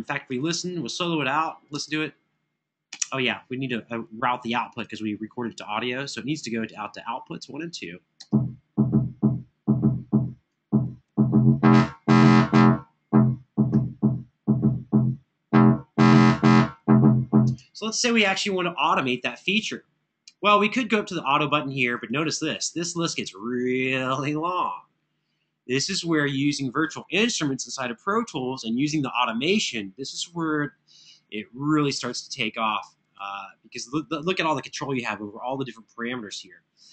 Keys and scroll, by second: 1.5 space, 2.6 space, 7.9 space, 17.2 space.